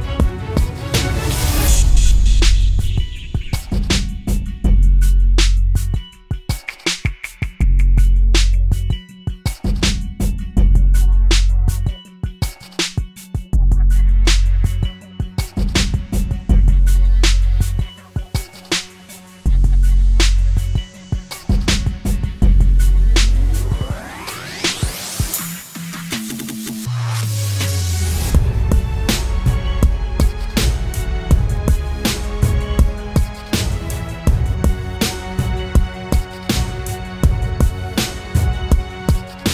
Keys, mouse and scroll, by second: 1.6 ctrl+t, 3.1 alt+shift+click, 8.8 alt+shift+click, 9.0 alt+shift+click, 12.7 alt+shift+click, 16.0 Down, 16.1 Down, 16.6 Return, 33.6 double click, 35.9-36.9 typing.